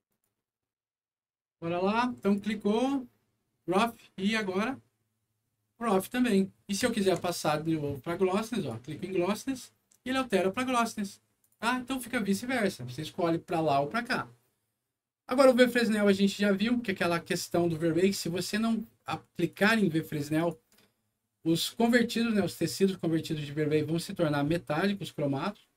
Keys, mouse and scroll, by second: 0.0 click, 0.7 Return, 2.1 click, 4.2 click, 6.9 ctrl+click, 8.5 ctrl+click, 11.4 click, 16.9 scroll up 1, 19.4 click, 20.3 click.